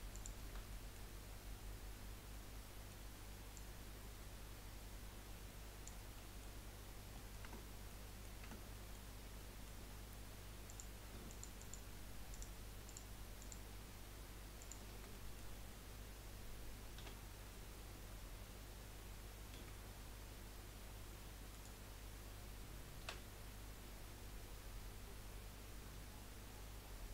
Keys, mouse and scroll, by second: 0.1 alt+shift+click, 0.7-3.9 middle drag, 3.9 click, 6.1 middle click, 6.9 scroll down 2, 7.1 middle click, 7.4 Tab, 7.9-8.4 middle drag, 8.4 Tab, 8.7 middle click, 9.0 scroll up 1, 9.3-10.6 middle drag, 10.6 click, 11.3 alt+shift+click, 11.6 alt+shift+click, 12.3 alt+shift+click, 12.8 alt+shift+click, 13.4 alt+shift+click, 14.6 alt+shift+click, 15.1-17.0 middle drag, 17.0 s, 23.0 s.